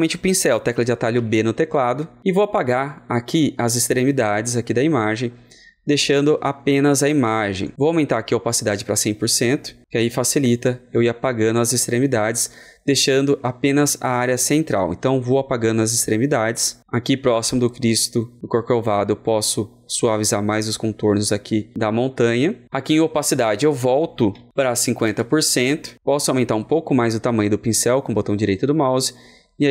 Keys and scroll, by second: 24.5 ctrl+a, 24.5 KP_5, 25.0 KP_0.